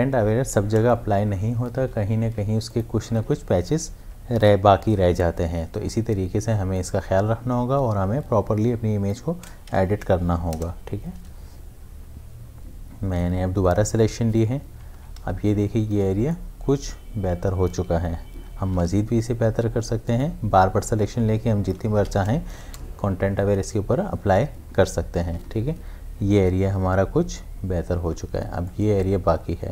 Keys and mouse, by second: 1.5 Return, 1.8 ctrl+d, 2.3 space, 2.7 ctrl+alt+click, 5.3 m, 6.8-9.9 drag, 9.9 shift+F5, 10.5 Return, 14.9 Return, 14.9 ctrl+d, 15.5 v, 16.1 space, 16.3 click, 16.6 space, 18.5 m, 20.2-22.1 drag, 22.1 shift+F5, 22.6 Return, 25.3 Return, 25.4 ctrl+d, 28.7 ctrl+d, 29.0 click, 29.3 space.